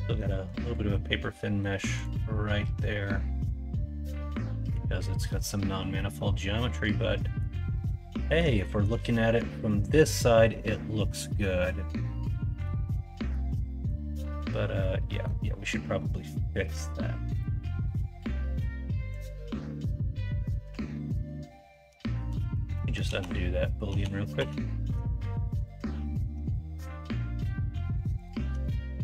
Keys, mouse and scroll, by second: 0.0 middle click, 1.0-1.6 middle drag, 3.7-4.7 middle drag, 6.1-7.4 middle drag, 8.2 middle drag, 8.6 middle drag, 9.1 shift+middle drag, 9.5-10.5 middle drag, 11.2 middle click, 11.6-12.6 middle drag, 13.1 middle drag, 13.6 middle drag, 15.1 middle click, 22.2 ctrl+z.